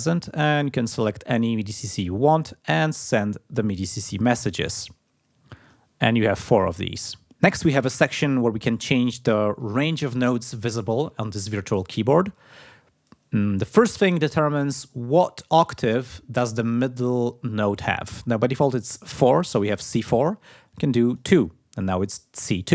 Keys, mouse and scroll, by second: 1.1-1.5 scroll down 2, 13.7 click, 16.9 click, 20.1 click, 21.0 click.